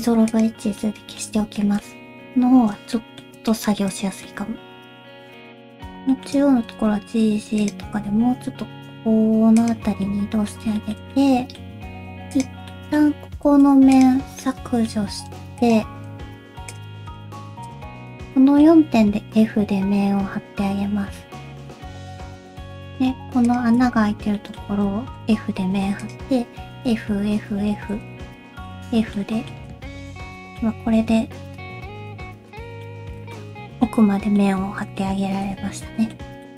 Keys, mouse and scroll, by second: 0.8 middle click, 1.6 shift+middle click, 1.9-2.6 scroll up 2, 2.6 1, 3.0 middle click, 3.5 shift+middle click, 3.9-4.2 scroll up 1, 4.2 middle click, 5.4 click, 5.7 shift+click, 6.1 shift+middle click, 6.6 g, 7.9 g, 10.0 middle click, 10.8 shift+middle click, 11.1 middle click, 11.9 3, 12.3 click, 12.7 middle click, 13.4 x, 14.4 middle click, 15.0 1, 15.6 click, 16.7 shift+click, 17.1 shift+click, 17.6 shift+click, 17.9 1, 18.0 middle click, 19.0 f, 19.4 middle click, 21.7 middle click, 22.2 click, 22.8 shift+click, 23.5 shift+click, 24.0 alt+z, 24.4 middle click, 24.7 alt+z, 25.2 f, 25.6 2, 26.0 click, 26.7 f, 27.1 f, 28.0 alt+z, 28.2 click, 28.2 middle click, 28.8 f, 29.1 middle click, 29.7 1, 30.3 middle click, 30.8 ., 32.1 /, 32.5 middle click, 33.0 alt+scroll up 2, 33.1 alt+z, 33.2 /, 33.3 middle click, 34.0 scroll up 1, 34.4 middle click, 35.5 /, 36.0 middle click, 36.1 scroll down 1, 36.4 middle click.